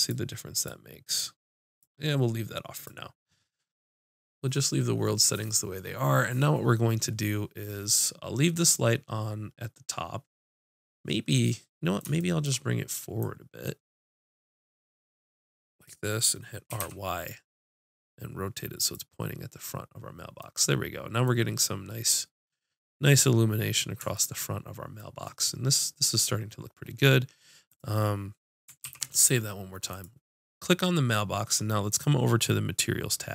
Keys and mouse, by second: 13.2-15.9 drag, 16.9 r, 22.7-26.6 middle drag, 27.7-28.8 drag, 28.8 ctrl+s, 29.9-31.6 drag, 31.7-33.3 drag.